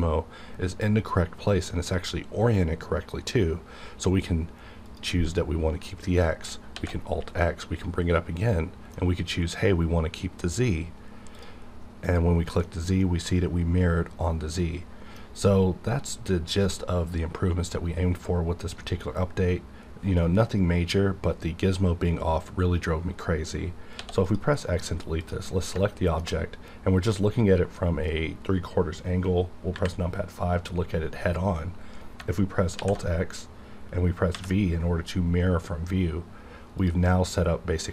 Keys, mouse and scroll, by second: 4.9 click, 6.0 middle click, 6.7 alt+x, 7.4-10.4 middle drag, 10.4 click, 12.1 click, 12.9-20.7 middle drag, 24.0 x, 24.2 click, 24.6 middle click, 24.9 scroll up 1, 25.7 middle click, 26.3 scroll up 1, 29.8 KP_5, 32.7 alt+x, 34.3 v, 36.8 click.